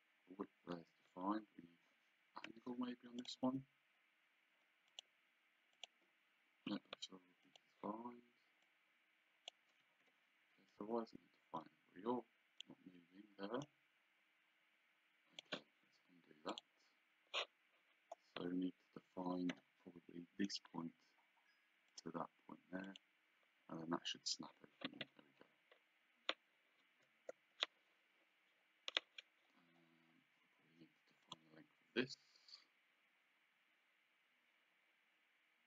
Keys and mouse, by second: 1.1 Escape, 2.5 d, 3.2 click, 4.9 click, 7.4 click, 8.7 click, 9.8 Escape, 10.7 click, 13.6 click, 16.5 click, 19.5 d, 20.4 click, 21.9 click, 27.2 Return, 31.2 click.